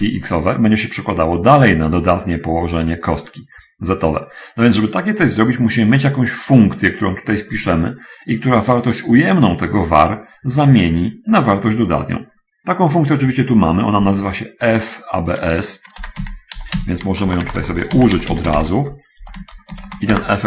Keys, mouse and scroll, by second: 7.0 right click, 15.1 click, 16.3-18.9 typing, 19.3 End, 20.1 shift+0.